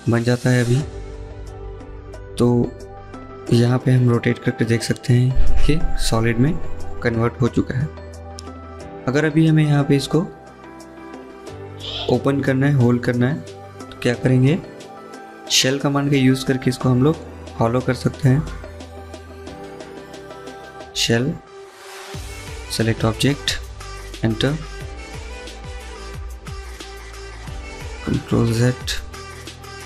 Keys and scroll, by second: 27.6 ctrl+z.